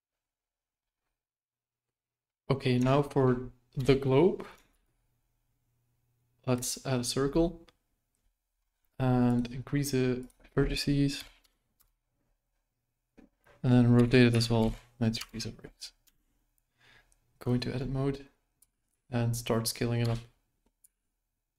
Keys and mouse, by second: 2.9 shift+middle drag, 3.7 KP_1, 4.7 shift+a, 9.3 click, 10.3-12.3 drag, 13.9 r, 16.0 Tab, 18.5 s, 20.8 s.